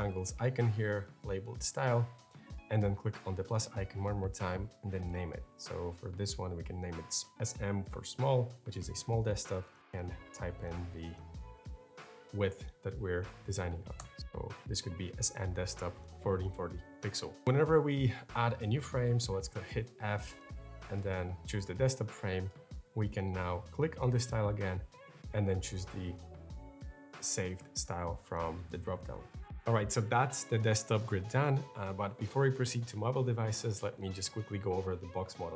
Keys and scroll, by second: 5.6-6.5 typing, 8.1-11.5 typing, 13.8 Return, 19.3 f.